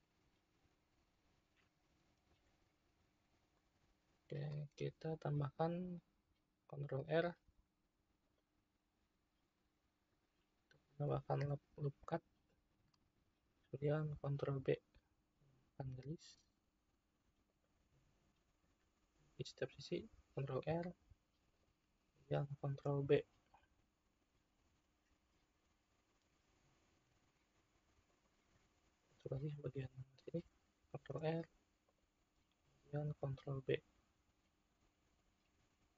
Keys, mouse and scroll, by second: 2.0 n, 3.6-6.5 middle drag, 6.9 ctrl+r, 12.0-14.3 middle drag, 14.3 ctrl+b, 18.0-19.7 middle drag, 19.7 ctrl+r, 22.7 ctrl+b, 28.5-30.2 middle drag, 30.2 ctrl+r, 33.1 ctrl+b.